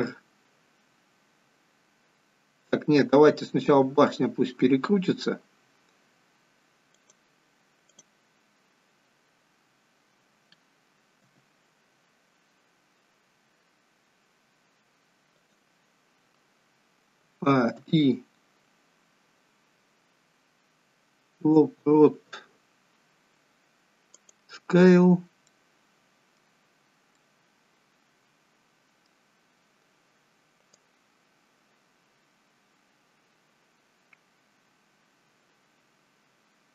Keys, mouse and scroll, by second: 7.9 click, 11.2 r, 17.3 a, 17.8 a, 17.8 i, 25.5 middle click, 26.7-27.1 scroll up 5, 27.1 middle click, 29.4-29.8 scroll down 1, 30.9 click.